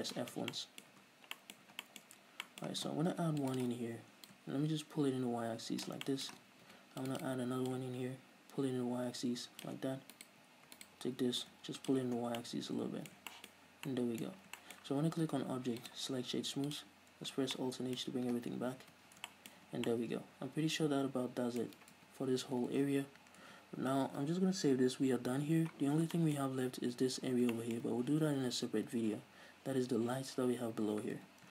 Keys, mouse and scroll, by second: 0.2 middle click, 0.2 scroll down 2, 0.5-1.4 shift+middle drag, 1.3 Tab, 1.4-1.7 scroll up 2, 1.8-2.5 middle drag, 2.0 Tab, 2.5 scroll up 2, 2.8-3.5 middle drag, 3.5 ctrl+r, 4.0 right click, 4.7-6.4 drag, 6.4-7.6 shift+middle drag, 7.0 ctrl+r, 7.6 click, 7.7 right click, 8.1-10.5 drag, 10.5 alt+right click, 11.2 alt+right click, 11.8 click, 12.4 scroll down 2, 12.6 Tab, 12.8-13.6 middle drag, 13.7-15.1 shift+middle drag, 14.1 scroll down 2, 15.2-16.3 middle drag, 16.3-17.9 drag, 17.7 scroll down 2, 17.9-20.0 middle drag, 19.2 alt+h, 20.0 a, 20.3-31.5 middle drag, 22.5 s, 23.2 ctrl+s, 26.2-26.5 scroll down 2, 26.9-27.9 scroll up 2, 28.7-29.1 scroll down 2, 29.1-29.7 scroll up 2.